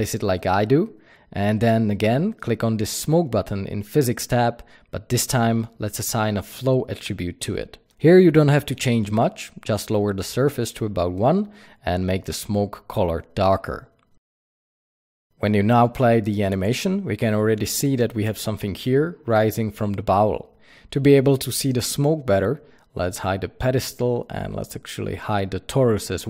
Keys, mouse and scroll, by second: 0.8 s, 1.4 click, 1.5 g, 2.3 click, 3.8 click, 5.4 click, 10.3 KP_Enter, 10.9 click, 13.5 drag, 14.3 click, 23.9-24.6 scroll up 1, 24.6 click, 26.0 click.